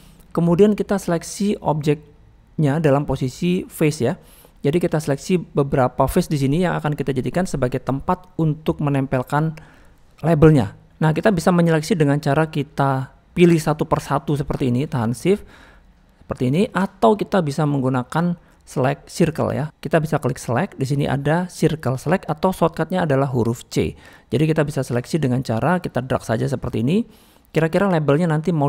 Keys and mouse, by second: 0.0 middle click, 0.9 click, 4.6 middle click, 5.8 middle click, 6.6 middle click, 10.9 Tab, 11.5 middle click, 13.7 click, 14.6 click, 15.1 shift+click, 16.2 shift+click, 16.6 shift+click, 19.4 click, 20.4-27.6 drag, 27.8-28.6 middle drag.